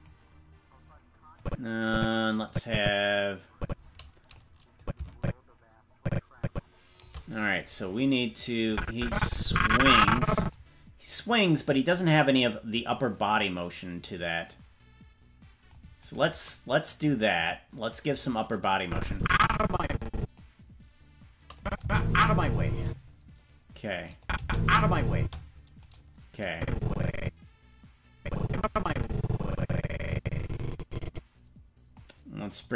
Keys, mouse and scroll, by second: 1.4 click, 2.4-4.4 drag, 4.8-7.0 drag, 8.7-10.5 drag, 11.6 right click, 13.3-15.7 drag, 16.1 right click, 16.8-18.1 drag, 18.8-20.4 drag, 21.6 click, 21.8 space, 22.8 space, 24.2 click, 24.4 space, 25.2 space, 25.9 right click, 26.5-32.0 drag, 32.5-32.7 right drag.